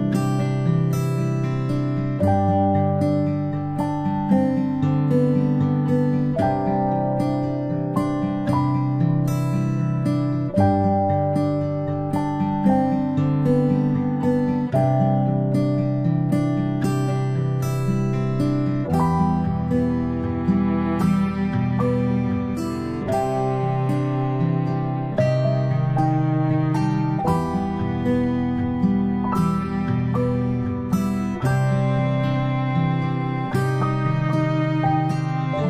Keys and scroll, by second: 10.8 ctrl+space, 11.3-11.8 ctrl+space, 12.8 ctrl+space, 23.0 ctrl+alt+z, 24.0 a, 27.6 Delete, 28.2 Delete, 30.6 Delete.